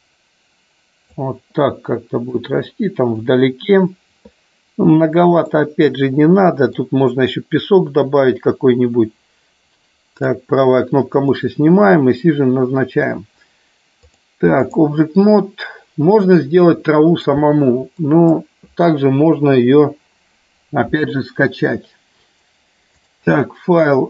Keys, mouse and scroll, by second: 2.4 click, 5.5-6.8 middle drag, 10.0 right click, 11.0 click, 14.1 click, 16.1-17.2 middle drag, 17.9 click, 19.5 Delete, 23.0-24.0 drag.